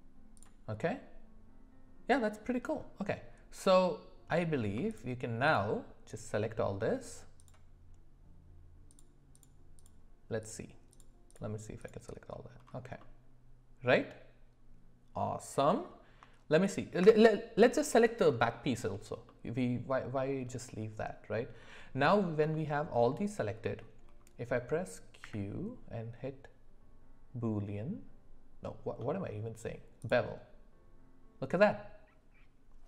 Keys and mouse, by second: 0.3 click, 0.8-2.1 middle drag, 5.4 shift+click, 7.4 shift+click, 8.9 shift+click, 10.4 shift+click, 10.9 shift+click, 11.3 shift+click, 11.8 shift+click, 13.0-15.9 middle drag, 19.3-22.1 middle drag, 22.5-22.8 shift+middle drag, 23.6 middle click, 25.2 q.